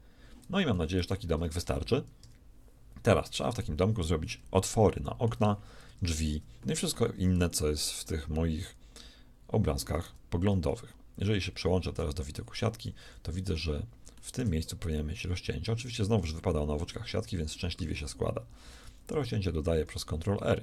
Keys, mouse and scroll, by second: 0.6 a, 0.9 z, 2.1 KP_1, 5.8 Tab, 6.4 Tab, 9.9 z, 11.7 a, 13.0 a, 18.9 ctrl+r.